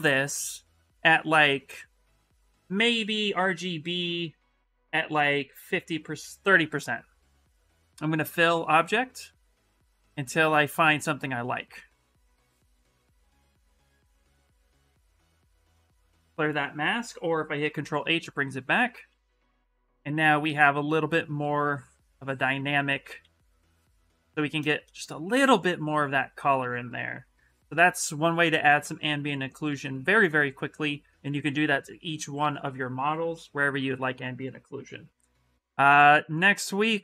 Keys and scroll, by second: 16.8 ctrl+z, 17.4 ctrl+h, 18.0 ctrl+h, 22.3 ctrl+z, 22.5 ctrl+z, 22.7 ctrl+z, 23.0 ctrl+z.